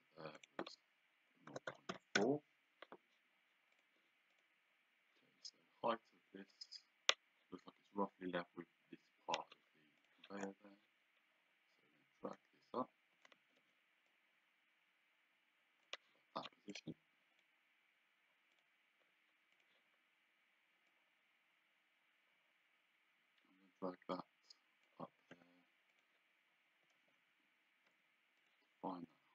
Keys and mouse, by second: 1.5 KP_0, 1.7 KP_Decimal, 1.9 KP_4, 2.2 Return, 3.7 click, 10.0 click, 12.3 click, 13.3 Escape, 14.1 click, 16.7 click, 18.6 click, 21.0 click, 25.4 d, 26.0 click, 27.0 Escape, 28.0 d, 28.5 click.